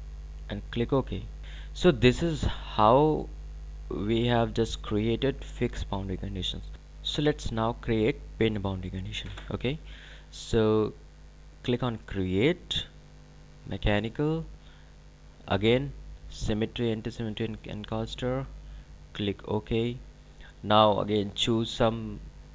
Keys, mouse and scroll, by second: 0.4 click, 2.2 click, 6.7 click, 11.6 click, 18.3 click.